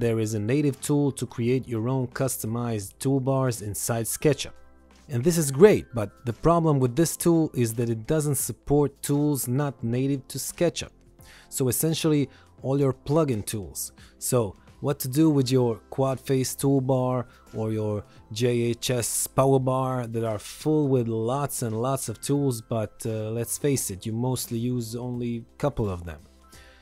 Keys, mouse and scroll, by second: 0.0 right click, 1.3 click, 2.9-3.9 typing, 3.9 click, 5.4 ctrl+click, 6.1 ctrl+click, 6.6 ctrl+click, 7.3 click, 8.0 ctrl+click, 9.0 ctrl+click, 9.3 ctrl+click, 9.7 ctrl+click, 10.4 ctrl+click, 12.3 right click, 13.4 click, 14.2 right click, 15.9 click, 16.5 right click, 18.1 click.